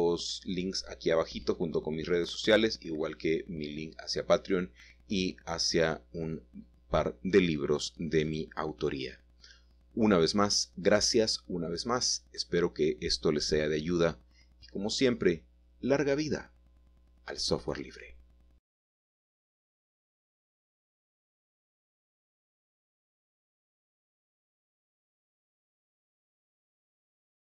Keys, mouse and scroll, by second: 1.2-1.6 typing, 4.0-5.1 drag, 5.2-5.9 typing, 7.0 click, 7.4-8.4 scroll down 2, 9.2 typing, 9.4 middle click, 9.8-10.8 scroll down 1, 11.0-12.0 scroll up 2, 11.2 typing, 11.5 shift+middle click, 12.1 shift+middle click, 12.6 typing, 14.0-15.2 middle drag, 15.2 ctrl+shift+s, 19.4 middle click, 22.3 middle click, 27.1 ctrl+s.